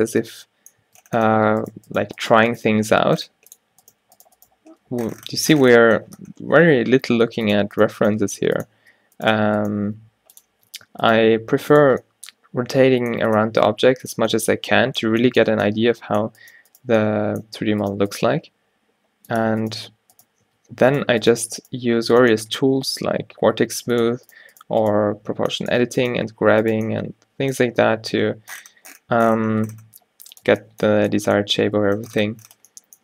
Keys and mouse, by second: 0.3 Tab, 0.9 Tab, 1.5 Tab, 2.1 g, 2.7 g, 4.0 g, 4.6 g, 8.2 g, 8.9 Tab, 9.4 Tab, 9.9 g, 10.6 Tab, 11.0 Tab, 11.3 g, 11.9 Tab, 15.7 Tab, 16.5 click, 18.4 g, 19.9-22.9 typing, 24.4 click, 25.1 q, 25.3 q, 26.3 q, 27.8 g, 30.6 Tab, 31.8 Tab.